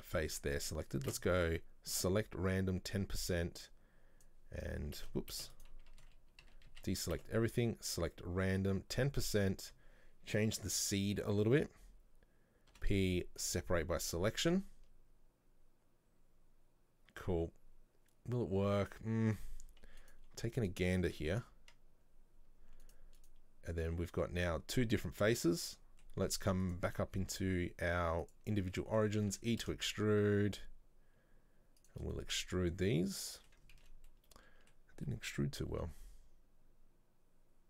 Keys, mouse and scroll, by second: 1.2 space, 3.1-5.1 drag, 5.1 space, 6.1 a, 6.5 a, 7.3 space, 9.3-12.3 drag, 13.9 scroll down 1, 14.3 scroll up 2, 18.6 Tab, 18.9 right click, 20.1 right click, 20.7 right click, 21.2 Delete, 22.9 right click, 23.3 right click, 24.6-25.1 middle drag, 25.1 Tab, 25.4 a, 25.8 middle click, 26.7-28.8 drag, 28.8 middle click, 29.4 e, 32.2-33.9 middle drag, 33.9 ctrl+z, 34.2-35.8 middle drag, 35.8 e.